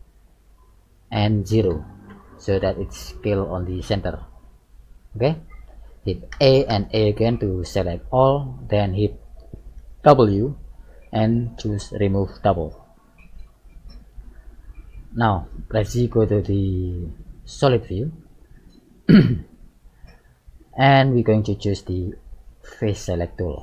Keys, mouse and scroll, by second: 2.6 middle click, 3.9-5.0 scroll up 3, 5.0 middle click, 5.0 scroll up 1, 6.3 a, 6.7 a, 7.4 middle click, 8.1-8.5 scroll down 2, 9.8 w, 13.2-14.0 scroll down 4, 14.1 middle click, 15.5 z, 15.9 middle click, 17.2-18.2 scroll up 3, 18.2 middle click, 18.2 scroll up 1, 19.6 shift+middle click.